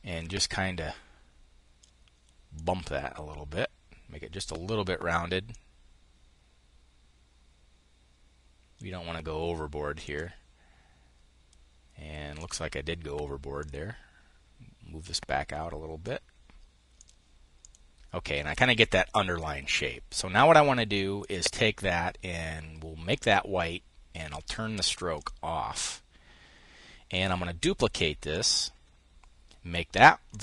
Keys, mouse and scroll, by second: 2.0-4.7 drag, 5.0-8.4 drag, 9.5 click, 11.9-13.1 drag, 16.4 click, 20.6 click, 22.6 click, 23.8 click, 24.6 click, 26.6 click, 27.7 click, 29.8 click.